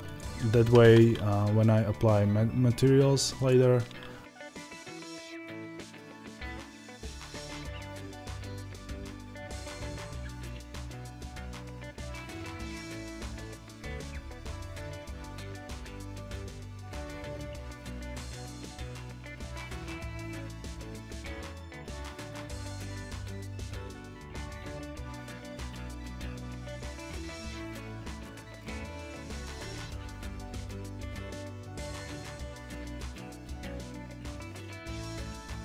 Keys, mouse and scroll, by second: 0.0 click, 4.6 alt+d, 19.5 click, 19.5 g, 20.1 click, 20.1 g, 25.7-31.6 middle drag, 25.9 scroll up 2, 27.6 scroll down 1, 31.6 click, 32.1 alt+d, 32.7 click, 34.9-35.6 middle drag, 35.3 s.